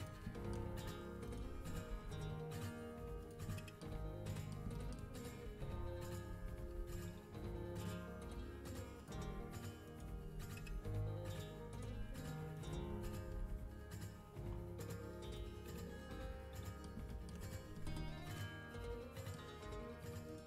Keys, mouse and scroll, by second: 0.3 middle click, 0.6 z, 1.1-2.5 middle drag, 1.4 z, 1.6 g, 3.5 middle click, 4.2 middle click, 5.4 z, 6.2 z, 7.1 g, 9.2 z, 9.9-11.6 middle drag, 10.1 z, 10.5 g, 11.9 z, 12.5-13.7 middle drag, 12.8 z, 13.2 g, 15.6-19.5 middle drag, 20.2 middle click.